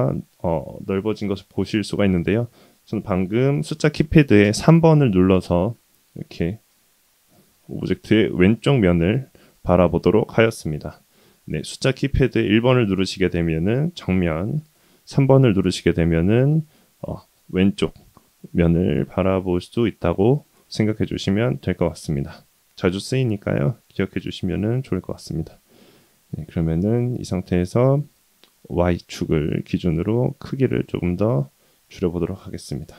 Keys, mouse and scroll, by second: 0.7-1.2 drag, 2.1-2.7 scroll down 1, 4.7 KP_3, 6.4 middle click, 7.4 KP_3, 12.8 KP_1, 14.7 KP_3, 21.8 click, 26.1-26.4 scroll down 2, 27.8 s, 30.9-31.6 scroll up 4, 31.7-32.4 scroll down 3.